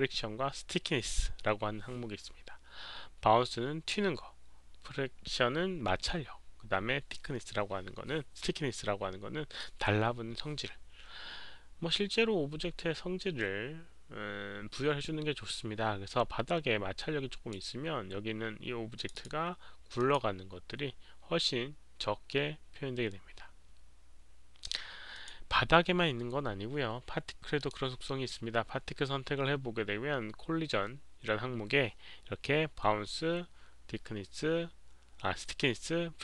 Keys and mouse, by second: 16.9-17.5 drag, 18.9 click, 19.1 click, 19.9 click, 25.2 click, 27.5 click, 29.0 click, 29.8 click.